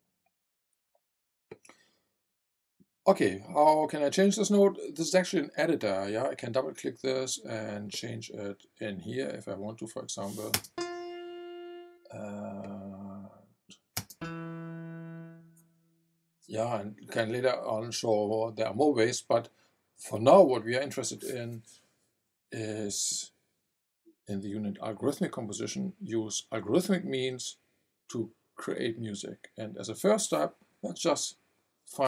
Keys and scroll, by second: 10.5 space, 13.9 space.